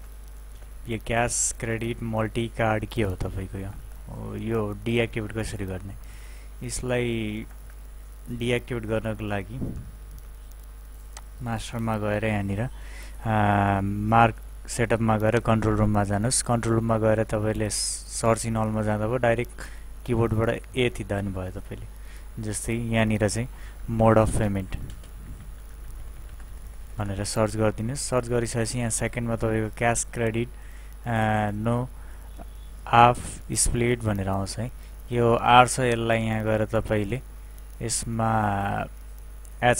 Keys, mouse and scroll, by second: 0.5 Return, 0.9 space, 1.0 Down, 3.1 Up, 4.4 Up, 4.4 Down, 5.1 Up, 5.9 Down, 7.4 Up, 11.1 click, 15.4 click, 20.7 typing, 22.9-26.6 typing, 35.9 click.